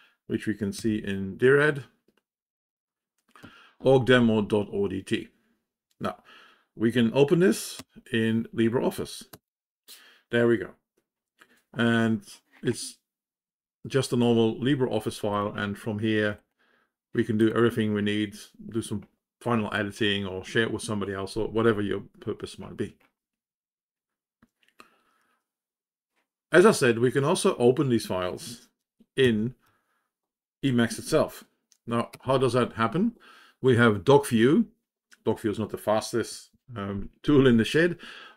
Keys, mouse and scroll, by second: 0.7 g, 3.3 Up, 7.8 &, 32.1 ctrl+o.